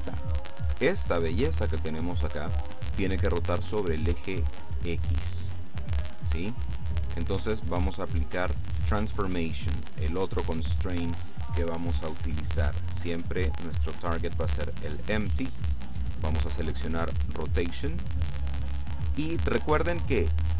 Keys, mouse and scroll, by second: 0.2-1.2 shift+middle drag, 7.2 click, 9.8 click, 13.4 click, 14.6 click, 17.0 click.